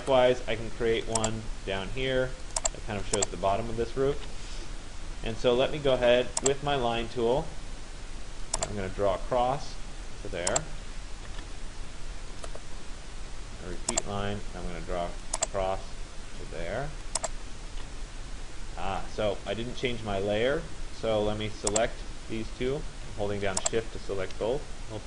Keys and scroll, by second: 17.4 Return.